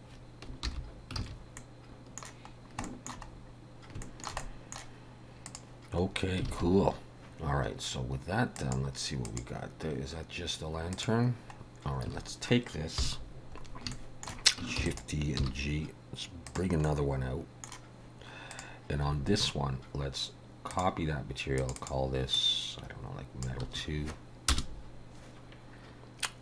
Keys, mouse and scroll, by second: 0.7 alt+h, 1.2 alt+a, 1.6 middle click, 2.6 scroll down 1, 2.9 shift+middle click, 3.3 scroll up 4, 4.1 shift+middle click, 4.4 middle click, 5.5 click, 6.1-6.4 scroll down 3, 6.5 alt+a, 6.9 scroll down 2, 8.6 click, 9.3 click, 11.0 click, 11.6-12.1 scroll down 3, 12.1 a, 13.0 KP_7, 13.9 shift+middle click, 14.9 shift+d, 15.4 g, 16.8 middle click, 18.5 click, 20.7 click, 21.6 click, 21.8 click.